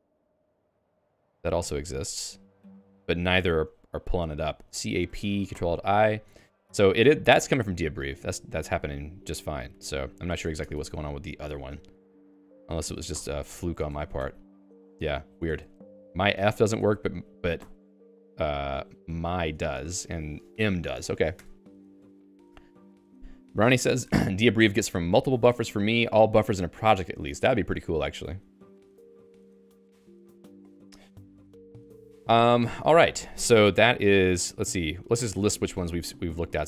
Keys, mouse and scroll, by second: 0.1 k, 0.5 Return, 1.3-5.5 typing, 6.9 Down, 7.2 Down, 7.5 Down, 7.7 Down, 7.9 Down, 8.1 Down, 8.3 Down, 8.5 Down, 8.7 Down, 8.8 Down, 9.1 Down, 9.3 Down, 9.4 Down, 9.6 Down, 9.8 Down, 10.0 Down, 10.3 ctrl+g, 10.6 Escape, 10.9 Escape, 11.1-13.9 typing, 11.5 Escape, 14.2 ctrl+alt+i, 15.4-17.1 typing, 18.3 ctrl+alt+i, 20.5 Down, 20.9 ctrl+g, 21.5 Escape, 34.6-36.4 typing.